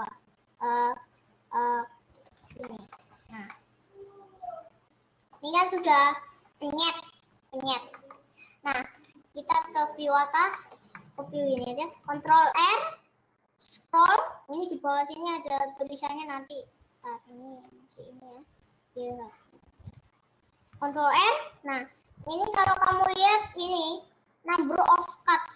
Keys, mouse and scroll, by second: 2.8 middle click, 3.2 scroll up 4, 3.6-5.4 middle drag, 5.4-5.8 scroll down 4, 5.8 middle click, 6.2-7.2 scroll up 4, 7.2-8.1 scroll up 1, 8.1-9.2 middle drag, 9.2 click, 9.4-9.9 scroll down 4, 10.2-10.8 scroll up 3, 10.8-12.2 middle drag, 12.2 ctrl+r, 20.2 Left, 21.0 ctrl+r.